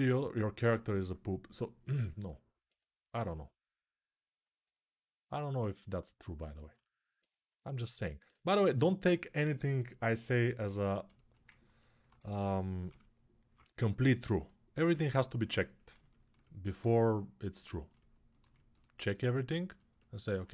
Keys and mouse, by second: 0.7-11.8 right drag, 11.8 click, 11.9-13.3 typing, 12.6-20.5 right drag.